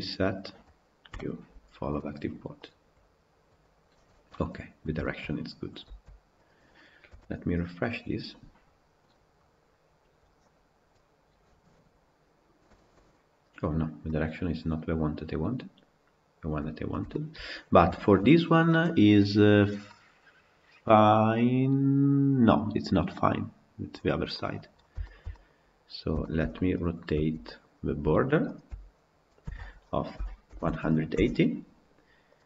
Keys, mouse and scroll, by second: 0.0 u, 2.7 u, 4.8 shift+middle click, 5.8 Tab, 6.3 click, 6.9 KP_Decimal, 12.6-16.6 shift+middle drag, 16.6-16.9 scroll up 1, 16.9-17.4 shift+middle drag, 17.4 scroll up 4, 17.7-18.1 shift+middle drag, 18.1 scroll down 1, 19.7-23.3 middle drag, 23.3 scroll down 1, 23.9-24.9 scroll down 6, 24.2 middle drag, 24.9-25.4 shift+middle drag, 25.4 scroll down 2, 26.0-26.7 shift+middle drag, 26.7 click, 27.1 Tab, 27.3-28.4 middle drag, 28.4 alt+click, 29.3 a, 30.1 r, 32.1 click.